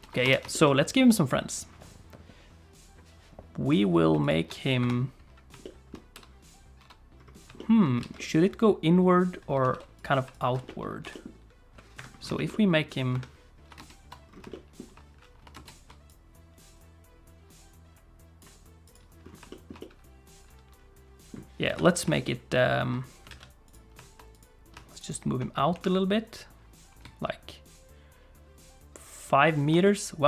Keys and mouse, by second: 0.5 shift+click, 1.3 click, 4.2 shift+click, 4.8 KP_7, 5.6 shift+middle click, 6.1 n, 6.8 n, 7.6 shift+middle click, 8.0 alt+a, 8.2 middle click, 9.6 ctrl+s, 10.0 click, 10.3 shift+click, 10.6 middle click, 11.0 g, 12.3 shift+click, 12.5 middle click, 13.1 KP_7, 13.8 ctrl+space, 16.1-18.4 drag, 18.8 click, 19.5 shift+click, 19.8 middle click, 20.0 click, 20.8 middle click, 21.6 KP_7, 22.2 shift+middle click, 23.3 alt+a, 24.9 shift+click, 25.7 g, 29.8-30.2 middle drag.